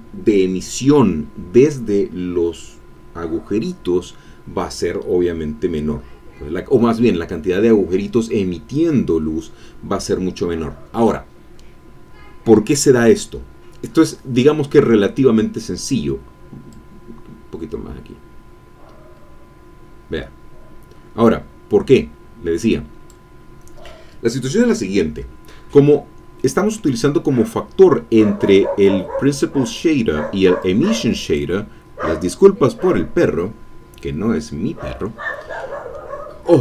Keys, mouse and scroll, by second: 5.8-6.1 scroll down 1, 16.7-23.3 drag, 25.8-26.3 scroll down 1, 26.3 middle click, 26.8 scroll up 1, 28.5-29.6 drag, 30.6-31.9 drag, 34.9 middle click.